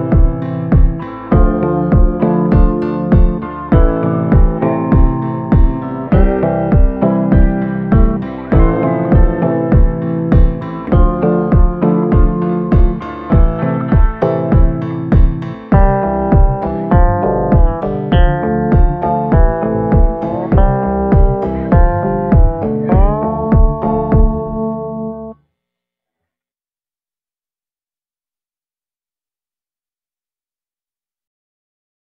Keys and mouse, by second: 0.5 click, 0.7 click, 1.1 click, 1.4 click, 2.8-3.4 [, 3.4 click, 4.0 ], 4.3 click, 4.7 ctrl+z, 5.1 click, 6.6 ctrl+z, 7.1 click, 7.3 click, 7.8 click, 8.9 click, 9.6 ctrl+z, 10.1 click, 10.9 ctrl+z, 10.9 click, 11.5 ctrl+z, 12.5 click, 13.0-13.5 ], 13.5-17.7 drag, 18.6 click, 19.1-19.7 [, 20.0 [, 20.4 click, 21.5 click, 22.0 ctrl+z, 22.2 click, 22.9 ctrl+z, 23.7 click, 24.1 ctrl+z, 24.5 click, 25.5 ctrl+z, 26.1-27.5 drag, 28.5 click, 30.6 middle click, 31.1 middle click, 31.9 middle click.